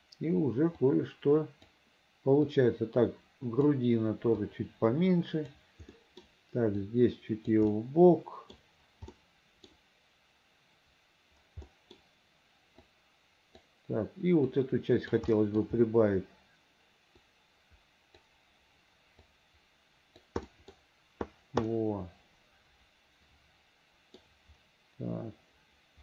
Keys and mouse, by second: 1.0 click, 2.6-3.8 drag, 4.5-5.7 drag, 6.1 middle click, 6.9 click, 7.9 middle click, 9.2 middle click, 11.8 middle click, 13.0 right click, 14.6 right click, 15.4 middle click, 17.3-18.3 drag, 19.4 click, 20.6 middle click, 21.8-24.3 middle drag.